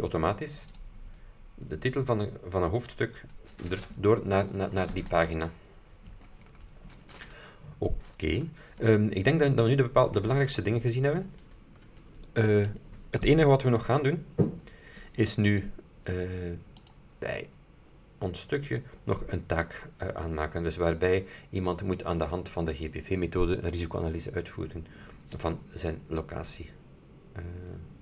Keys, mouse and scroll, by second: 0.9 click, 10.5-10.8 scroll down 2, 16.9 click.